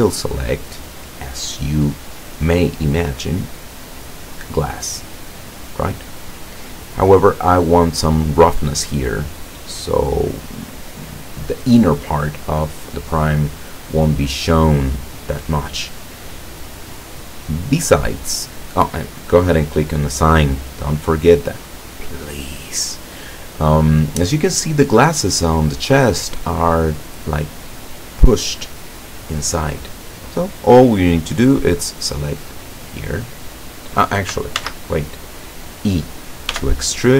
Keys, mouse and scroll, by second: 4.9 click, 6.7-8.3 drag, 9.5 click, 15.1 click, 17.6-18.9 middle drag, 19.1-19.5 scroll up 1, 20.4 click, 33.2 click, 34.7 ctrl+z, 36.6 e.